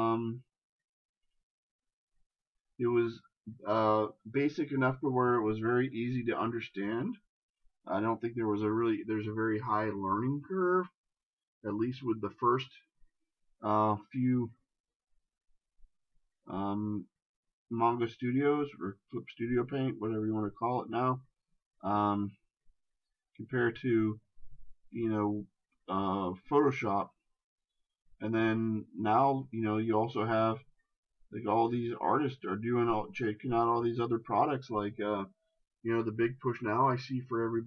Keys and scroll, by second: 33.3 ctrl+z.